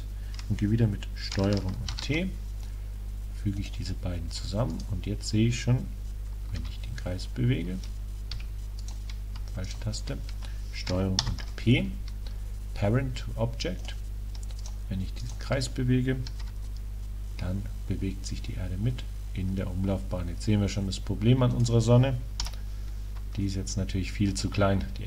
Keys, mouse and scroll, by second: 1.9 ctrl+t, 4.8 click, 5.1 right click, 6.6 r, 8.9-11.5 right drag, 11.3 ctrl+p, 14.6-17.2 right drag, 16.5 r, 21.7 click.